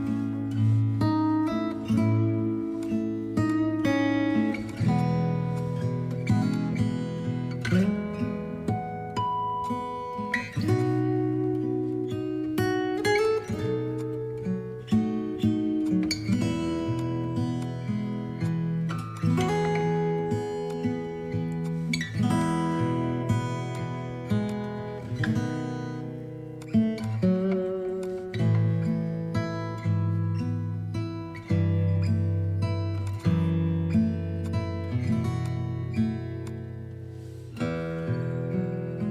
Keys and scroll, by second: 0.3 Down, 8.5 ctrl+d, 29.7 Down.